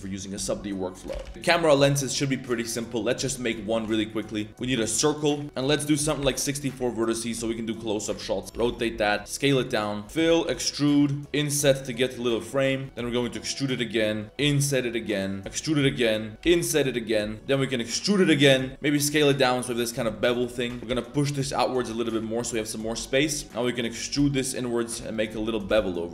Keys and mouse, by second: 0.1 Tab, 0.1 middle click, 1.1 ctrl+z, 1.2 ctrl+z, 1.3 Tab, 1.3 shift+click, 1.3 3, 1.3 shift+s, 1.3 KP_3, 3.6 shift+click, 3.8 shift+a, 4.5 Tab, 5.5 click, 6.9-7.2 middle drag, 8.4 Tab, 8.4 KP_3, 8.4 1, 8.4 r, 9.2 ctrl+s, 10.0-11.2 typing, 12.8 shift+middle click, 13.1 e, 14.2 middle click, 14.3 i, 15.4 e, 16.4 i, 17.3 e, 18.7 s, 19.3 drag, 19.7 Tab, 19.8 shift+drag, 20.1 middle click, 20.2 click, 20.4 shift+middle click, 20.8 1, 20.8 z, 20.8 a, 20.8 g, 22.1 middle click, 22.4 3, 22.5 click, 22.7 middle click, 23.0 shift+middle click, 23.4 middle click, 23.4 e, 24.1 2, 24.6 alt+click, 25.0 alt+click, 25.5 ctrl+b.